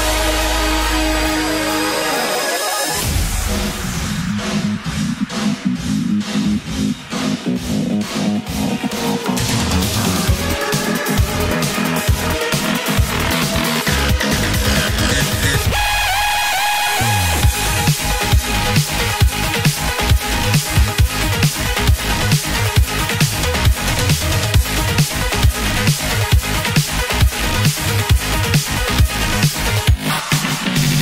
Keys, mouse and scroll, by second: 4.3 middle click, 7.6-8.5 scroll down 9, 9.2-9.8 scroll down 9, 10.2-11.7 scroll up 8, 11.8-12.2 scroll up 4, 12.4-13.0 scroll down 5, 15.3 ctrl+s, 18.4-21.1 typing, 28.9 scroll up 3, 29.0-30.0 scroll down 5.